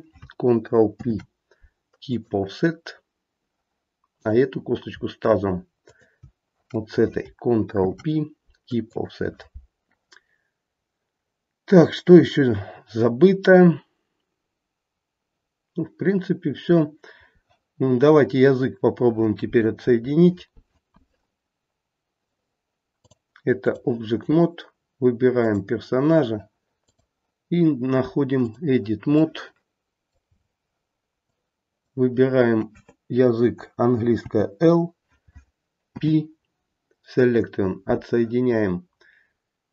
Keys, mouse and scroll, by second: 0.9 ctrl+p, 5.8 shift+click, 7.7 ctrl+p, 22.9 click, 25.4 click, 29.1 middle click, 29.6 middle click, 30.2-31.2 scroll up 1, 31.2 click, 31.2-32.6 scroll up 2, 34.2 l, 35.8 p.